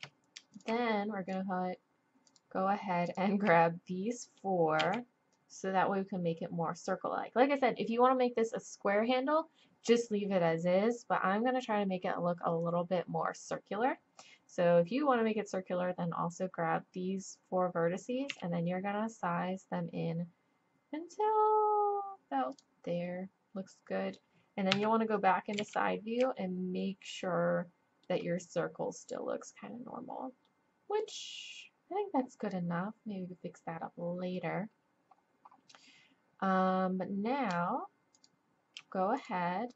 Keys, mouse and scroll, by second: 0.5-3.6 drag, 3.6-6.5 middle drag, 4.8 z, 8.3 z, 18.3 s, 23.1 click, 23.5 click, 23.6 middle click, 23.8 click, 24.0 middle click, 24.7 KP_3, 25.6 z, 29.7 middle click, 30.6 click, 31.3 click, 31.6 click, 32.5 middle click, 35.1 middle click, 35.2 click, 35.6 click, 38.2-39.7 drag.